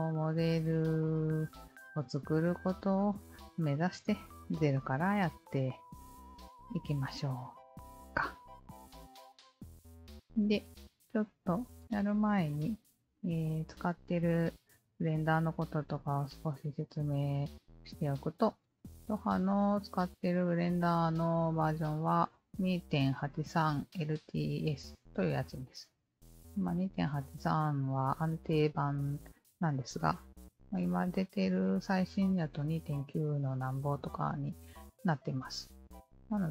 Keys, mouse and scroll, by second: 0.2-0.7 alt+drag, 1.0-3.8 drag, 4.1-6.8 alt+drag, 10.5 alt+click, 11.4 alt+click, 13.1-17.2 alt+drag, 25.6-27.8 alt+drag, 29.5-30.6 alt+drag, 34.8-36.5 alt+drag.